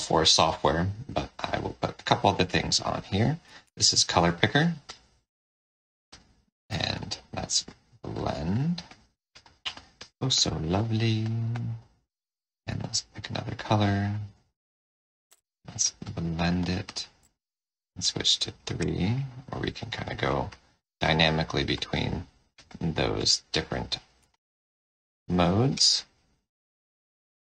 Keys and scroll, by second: 6.6 4, 17.1 3.